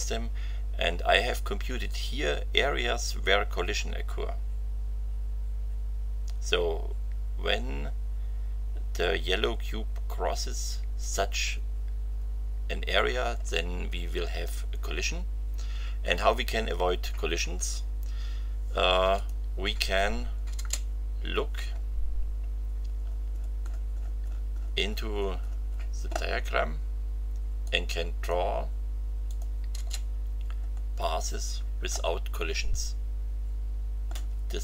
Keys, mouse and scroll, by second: 19.1 click, 20.5 space, 21.3-21.9 scroll down 1, 23.0-25.7 scroll down 6, 25.7 scroll down 1, 27.6 click, 29.2 click, 29.7 space, 30.7-31.1 scroll up 2, 31.9-34.2 shift+middle drag.